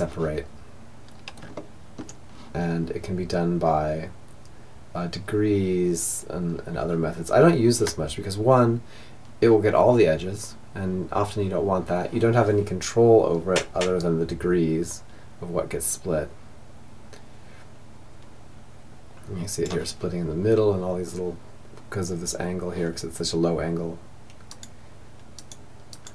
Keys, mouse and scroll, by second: 0.6-6.7 middle drag, 13.2-14.7 drag, 23.7-26.1 drag.